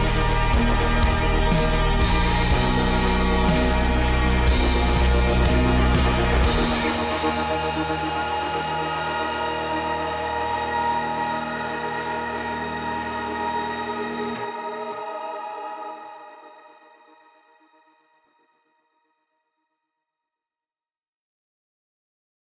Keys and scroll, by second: 3.9 Return, 4.2 Return, 4.5 5, 4.7 Return.